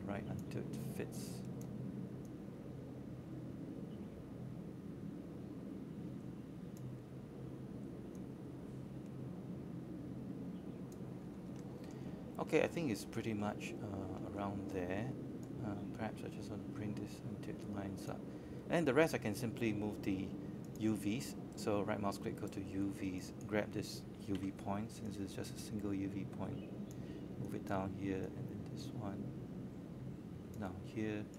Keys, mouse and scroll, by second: 0.3 click, 3.0-3.5 scroll down 1, 4.5 click, 5.8 scroll up 1, 7.0 alt+middle click, 7.8 alt+middle click, 9.0-10.5 drag, 10.6 alt+middle click, 11.9-15.4 drag, 15.4 scroll up 1, 15.8 alt+middle click, 16.8-17.4 scroll down 1, 17.6 alt+middle click, 19.1-31.3 drag.